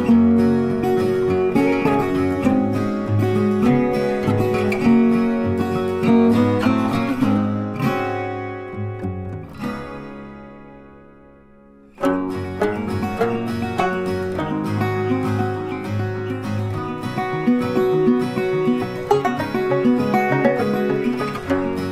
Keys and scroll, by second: 12.7 ctrl+d.